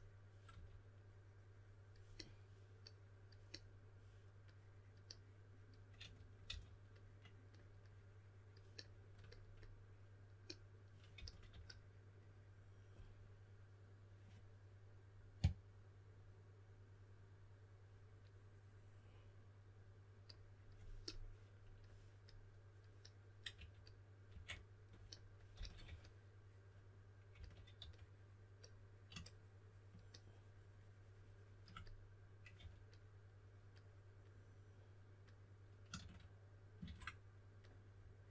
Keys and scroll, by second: 0.5 typing, 6.0-6.4 typing, 11.1-11.5 typing, 23.5-24.3 typing, 25.5-25.8 typing, 27.3-27.7 typing, 32.5 4.